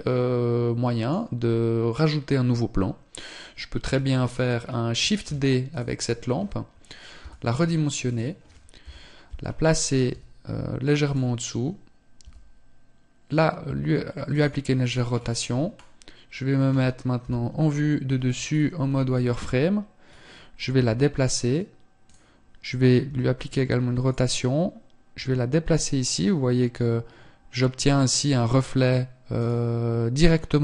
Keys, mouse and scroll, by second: 3.5 scroll down 1, 4.2-4.8 scroll down 3, 4.8 shift+d, 6.8 s, 7.7 click, 8.0 KP_3, 9.7 g, 10.7 click, 11.4 r, 14.7 scroll down 1, 16.8-17.4 scroll up 1, 16.8 KP_7, 17.8-18.2 scroll down 4, 18.4 z, 19.6-19.9 scroll up 1, 20.4 g, 21.6 click, 22.6 r, 23.7 click, 24.5 g.